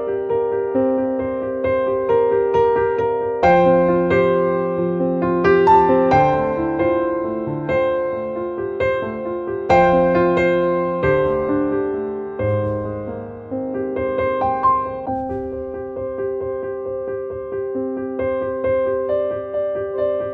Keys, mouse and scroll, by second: 1.9 click, 2.7 right click, 4.6 click, 6.1-9.7 drag, 11.0 click, 14.7 click, 17.0 click.